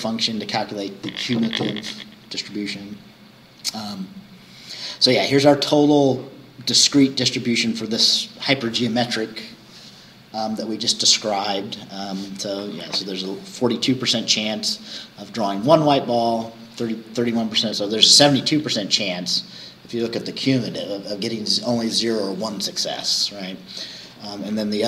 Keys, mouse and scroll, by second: 3.4 scroll down 2.